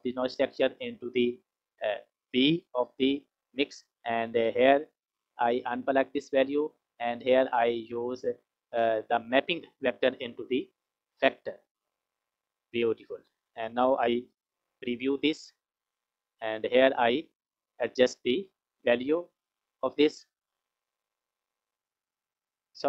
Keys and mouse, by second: 4.2 click, 5.4 click, 5.8-6.4 drag, 7.2 click, 8.3-11.2 drag, 11.9 click, 13.0 click, 14.9 ctrl+shift+click, 16.2 click, 21.7 F6.